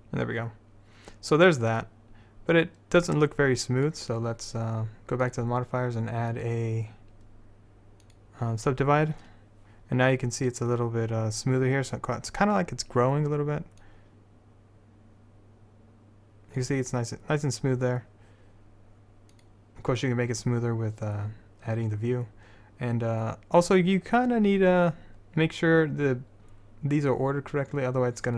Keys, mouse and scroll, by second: 5.4-8.3 drag, 14.0-16.0 drag, 19.5-24.7 drag.